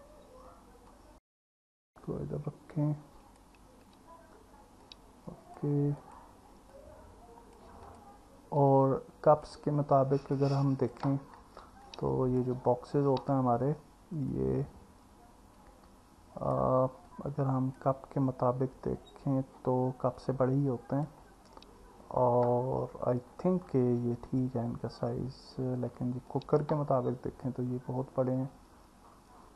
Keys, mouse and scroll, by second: 0.9 click, 2.8 click, 4.9 click, 6.0 click, 6.8 click, 7.8 click, 8.6 click, 10.2 click, 12.0 click, 20.2 click, 26.4 click.